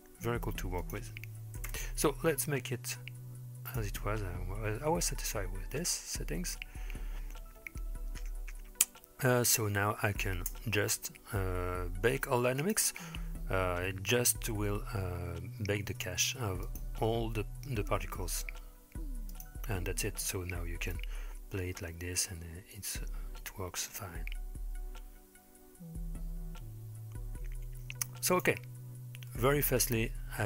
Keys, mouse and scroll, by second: 0.8 click, 3.7 click, 10.5 space, 11.1-12.6 scroll down 2, 12.6-14.0 drag, 16.7-17.0 drag, 19.3 click, 21.0-28.5 drag, 28.9-30.4 scroll down 2, 29.3-30.4 middle drag.